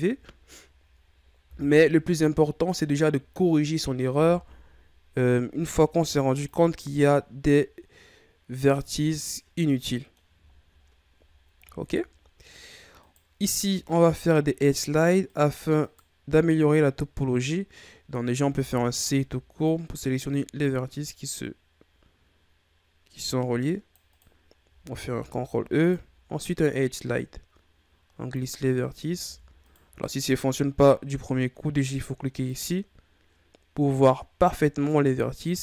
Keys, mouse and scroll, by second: 0.4-1.4 ctrl+scroll up 2, 1.4 KP_3, 2.4-3.2 ctrl+scroll down 1, 3.2-4.3 shift+scroll up 3, 4.3 KP_1, 5.6 ctrl+Tab, 7.1-8.1 ctrl+scroll up 5, 8.1-8.7 scroll down 2, 8.7-9.2 ctrl+scroll up 3, 9.2-10.5 middle drag, 10.5 shift+scroll down 2, 10.8-11.5 scroll up 8, 11.5-12.0 shift+scroll down 7, 12.0-13.0 scroll up 1, 13.0 right click, 14.0 shift+right click, 14.6 shift+right click, 15.3 shift+right click, 15.8 shift+right click, 16.8-17.2 scroll up 1, 18.4 c, 25.0 ctrl+e, 29.2 ctrl+z, 29.6 right click, 30.2-32.2 ctrl+scroll up 5, 32.4 click, 35.0 right click.